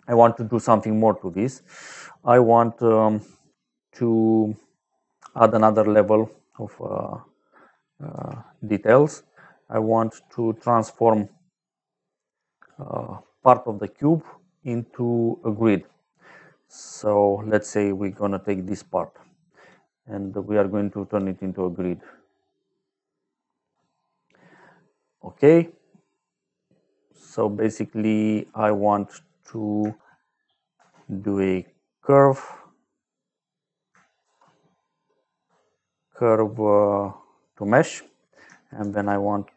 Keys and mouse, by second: 1.2 click, 1.9 middle click, 3.6 middle click, 4.7 click, 5.9 middle click, 7.2 click, 8.1 g, 8.8 click, 10.9 middle click, 11.9 click, 14.5 click, 17.0 click, 18.8 click, 19.7 middle click, 21.7 middle click, 25.9 middle click, 27.4 middle click, 28.3 click, 29.2 click, 30.7 shift+a, 31.9 click, 34.1 shift+a, 37.2 click, 37.9 click, 38.7 shift+a.